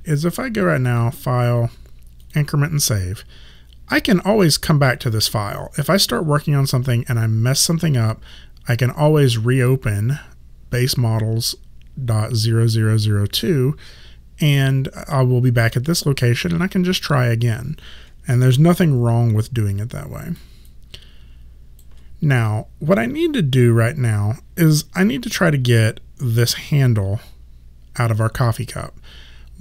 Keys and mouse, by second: 0.9 click, 18.7 alt+click, 20.7 alt+right click.